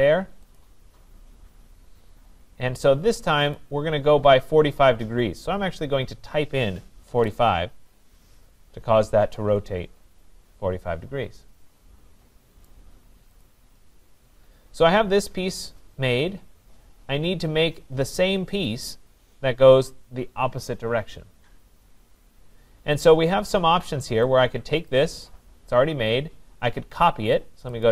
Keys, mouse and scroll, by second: 0.6 click, 3.6 click, 6.9-7.7 typing, 7.8 Return, 8.8 scroll, 12.6 right click, 13.4 click, 13.8-16.1 scroll, 23.3-24.8 scroll, 24.9 click, 27.8 click.